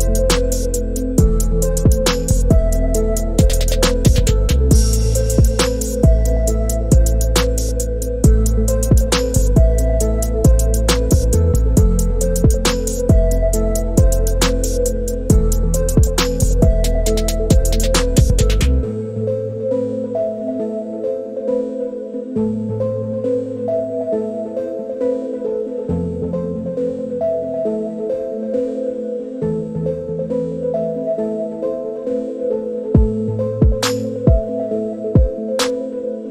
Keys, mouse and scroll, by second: 1.1 click, 2.7 middle click, 3.8-5.1 drag, 6.6 s, 9.0-9.4 drag, 9.9-11.0 middle drag, 12.0-16.3 middle drag, 16.8 click, 19.2-20.7 middle drag, 21.5 middle click, 23.9-25.8 drag, 28.0-28.6 middle drag, 29.8 click, 35.0-36.3 drag.